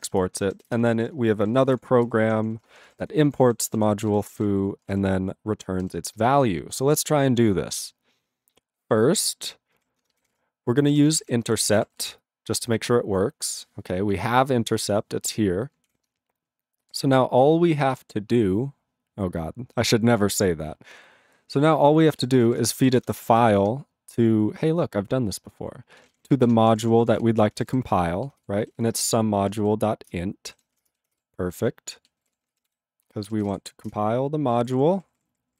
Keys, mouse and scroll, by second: 0.2 Return, 0.7 Return, 1.0 ctrl+p, 1.3 ctrl+space, 1.4 ctrl+n, 1.5 ctrl+n, 1.7 ctrl+e, 2.0 ctrl+g, 2.2 ctrl+p, 2.4 ctrl+p, 2.5 ctrl+p, 2.6 ctrl+space, 2.6 ctrl+e, 2.7 ctrl+n, 2.8 ctrl+e, 3.2 ctrl+p, 3.3 ctrl+a, 3.7 ctrl+e, 4.0 ctrl+g, 4.2 ctrl+n, 4.3 ctrl+a, 4.3 ctrl+n, 4.8 ctrl+space, 4.8 ctrl+e, 5.8 ctrl+g, 28.5 ctrl+g, 30.1 ctrl+Return, 30.9 Return, 32.3 Return, 33.2 ctrl+g, 33.9 ctrl+Return, 34.6 ctrl+=, 35.3 ctrl+=.